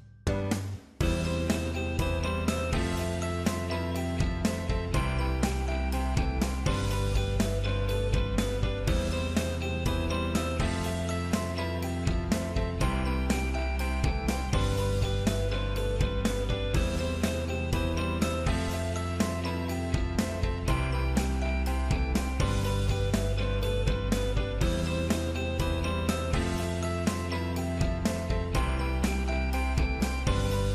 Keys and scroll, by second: 10.8 ctrl+v.